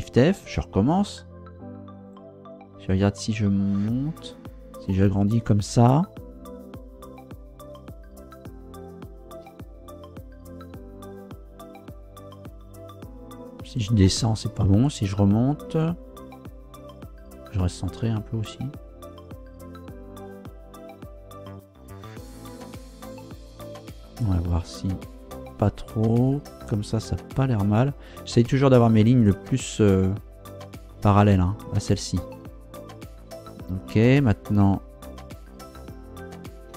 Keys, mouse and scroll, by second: 0.4 shift+f, 1.5 Down, 2.5 Up, 6.9 Up, 9.4 Down, 27.2 click, 36.5 g.